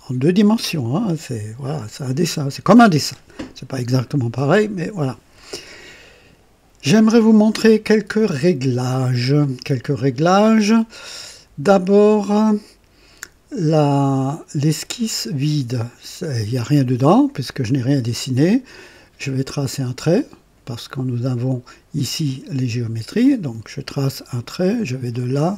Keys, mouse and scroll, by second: 23.1 click, 25.0 click.